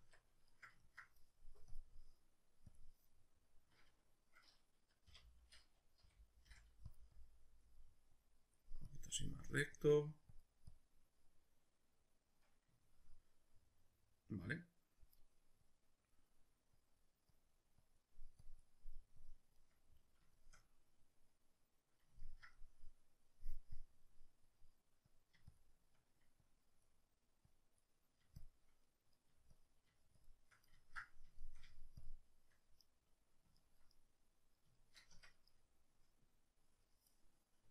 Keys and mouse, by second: 0.0 Tab, 1.7-7.0 drag, 5.1 k, 6.1 g, 6.5 f, 7.1 click, 7.8 middle click, 8.1 click, 9.2 middle click, 9.8-11.0 drag, 11.0-15.7 middle drag, 15.7-19.6 drag, 19.6-23.8 middle drag, 23.8-28.8 drag, 28.8 middle click, 29.5-30.8 shift+drag, 30.8-32.0 ctrl+middle drag, 32.0 shift+click, 32.9-35.2 middle drag, 35.1 Tab.